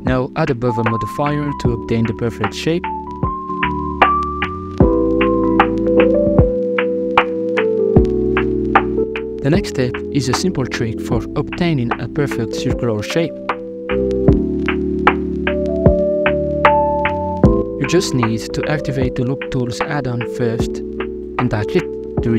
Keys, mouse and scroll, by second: 1.2-2.4 middle drag, 2.4 click, 3.5-4.6 middle drag, 4.9 ctrl+r, 9.0-9.8 middle drag, 9.8 ctrl+r, 10.4 middle click, 10.6 middle click, 10.8 ctrl+r, 11.5 KP_Divide, 11.7 middle click, 11.9 ctrl+r, 13.4 ctrl+r, 13.6 middle click, 13.8 ctrl+r, 14.3 ctrl+r, 14.5 alt+right click, 15.1 ctrl+r, 17.1 middle click, 17.5 scroll up 1, 18.1 alt+shift+right drag, 18.5 alt+shift+right click, 18.9 alt+shift+right click, 19.3 w, 21.6-22.3 middle drag.